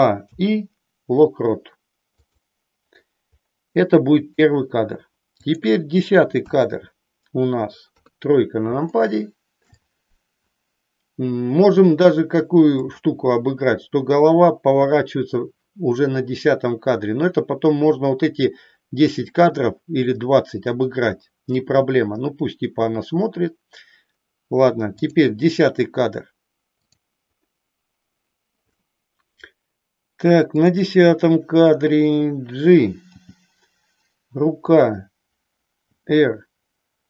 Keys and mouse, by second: 0.2 i, 2.6 i, 3.6 middle click, 5.5 click, 6.4 KP_1, 8.0 KP_3, 8.9 shift+middle click, 12.8 click, 25.0 click, 26.6-28.0 drag, 30.4-31.6 drag, 33.1 g, 36.0 r.